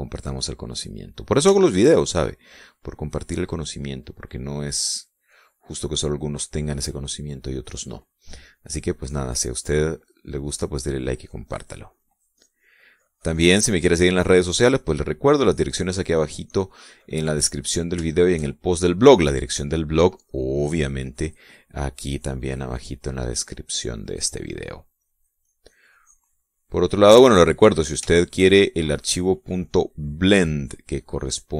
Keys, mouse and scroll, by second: 0.2 middle click, 1.7 click, 2.7 shift+middle click, 3.8-4.9 drag, 5.1 click, 5.9 middle click, 7.0 middle click, 8.2 middle click, 9.5-17.7 drag, 17.7-18.9 middle drag, 19.3-20.3 shift+middle drag, 22.3 click, 22.8-28.9 drag, 29.3 shift+middle click, 29.7-31.5 shift+scroll up 2, 30.2 shift+middle click.